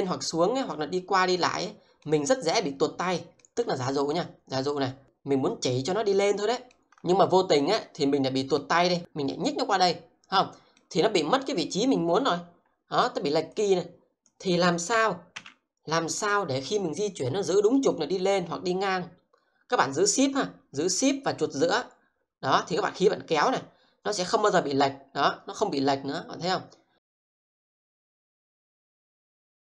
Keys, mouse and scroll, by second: 6.9 alt+middle click, 13.5 click, 15.0 z, 15.1 z, 21.7-29.6 shift+middle drag.